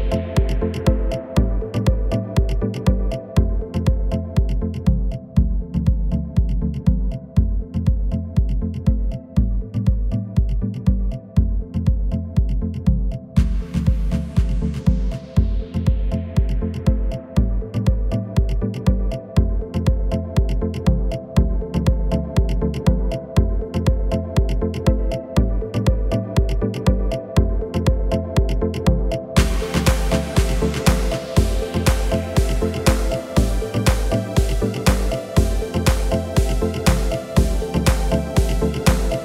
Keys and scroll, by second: 4.0 KP_1, 8.4 KP_1, 18.1 shift+a, 19.9 Tab, 21.5 shift+a, 36.4 s.